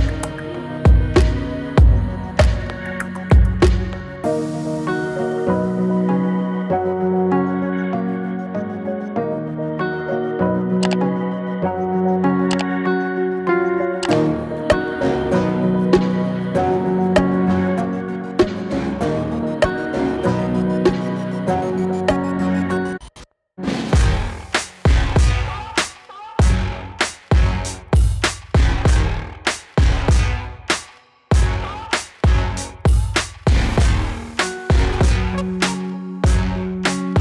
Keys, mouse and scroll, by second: 12.1-18.8 drag, 21.7 click, 25.1-30.4 drag, 30.4 ctrl+z, 31.3 click, 34.9 click.